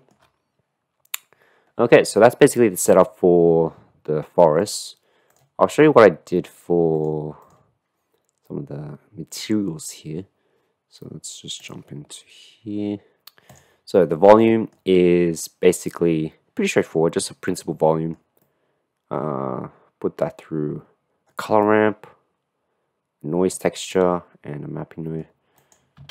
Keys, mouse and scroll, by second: 5.0 middle click, 5.3 middle click, 11.6 click, 14.5 middle click, 15.4-16.6 middle drag, 16.7 middle click, 17.7 middle click, 18.4-19.7 middle drag, 19.7-21.4 drag, 21.6-22.9 drag, 22.9 middle click, 23.9-25.2 middle drag, 25.6 click.